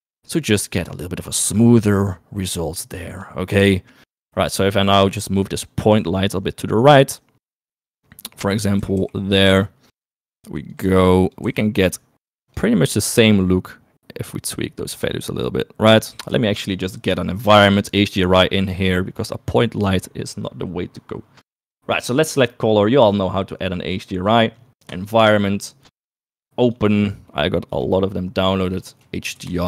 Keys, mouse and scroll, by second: 6.2 g, 8.9 g, 10.9 g, 11.6 g, 13.8-16.2 drag, 16.5 shift+middle click, 18.0 click, 23.3-25.0 drag, 26.6 click.